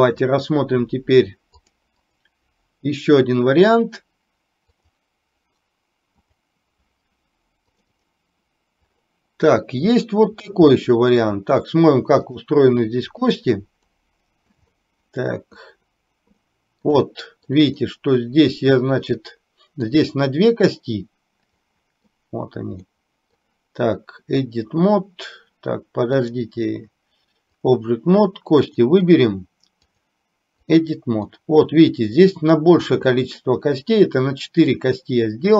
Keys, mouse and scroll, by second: 0.1-1.9 drag, 2.1-6.7 drag, 10.1 middle click, 10.7 shift+middle click, 12.5 click, 14.0 middle click, 14.9 shift+middle click, 16.5 middle click, 17.2 shift+middle click, 17.9-20.0 middle drag, 21.7 middle click, 23.0 middle click, 26.4-27.9 drag, 29.9-30.9 drag, 31.5-32.7 middle drag, 33.2 shift+middle click, 34.9-35.5 middle drag.